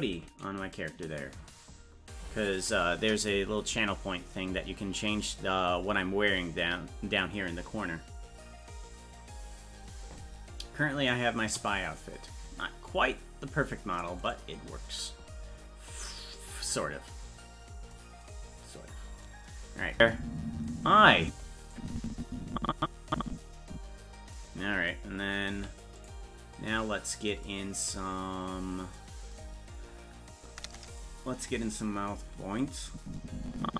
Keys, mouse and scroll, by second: 15.6-16.3 scroll up 1, 16.3-16.9 scroll up 10, 17.5-18.6 scroll up 2, 18.6-19.2 scroll up 1, 19.2-19.9 scroll up 1, 19.9 space, 21.7-24.3 drag, 25.5 i, 26.9-28.1 scroll up 4, 28.1-28.6 scroll up 1, 28.9-29.6 scroll up 4, 29.7-30.3 scroll up 1, 32.6-33.7 drag.